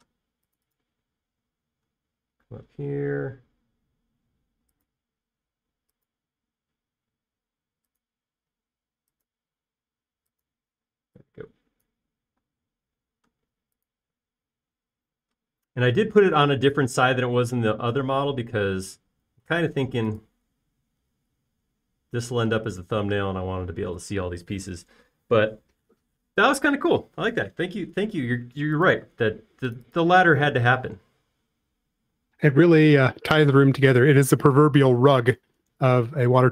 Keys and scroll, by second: 4.3 l, 9.8 l, 11.8 typing, 13.5 typing, 33.2 typing, 34.3 typing.